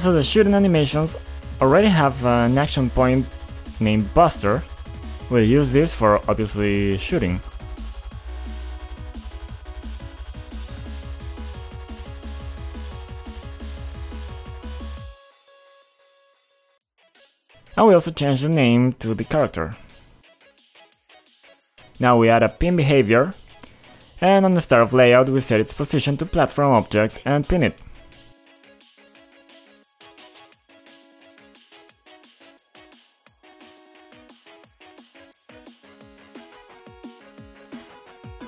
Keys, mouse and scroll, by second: 1.6 click, 4.7 click, 5.2 click, 6.6 click, 7.4 click, 8.0 click, 9.6 click, 12.0 click, 13.2 click, 16.3 click, 17.3 click, 18.2 click, 19.0 click, 21.4 click, 22.7 click, 23.1 click, 23.3-24.1 scroll down 2, 24.1-24.4 scroll up 2, 25.0 click, 25.1 click, 26.4 click, 27.4 click, 28.6 click, 29.2 click, 29.4 double click, 30.0-31.7 typing, 31.4 click, 32.1 double click, 33.0 click, 33.4-34.1 scroll down 2, 34.2 click, 34.3 click, 35.5 click, 35.6 click, 36.7 click, 37.2 click.